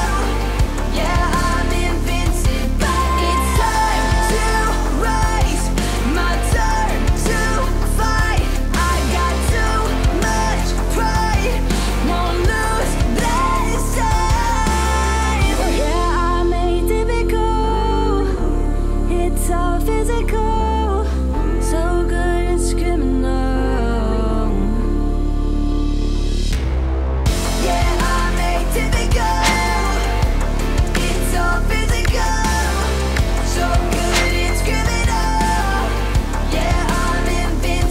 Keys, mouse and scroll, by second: 5.2 click, 6.9 p, 8.1-9.1 drag, 10.2-12.7 shift+drag, 13.6-16.1 drag, 18.2-18.9 middle click, 19.3 click, 20.3 p, 21.1-25.5 drag, 28.4-29.0 alt+drag, 29.9 alt+click, 31.1 p, 31.8-35.9 drag, 36.1 s, 36.6-37.9 drag.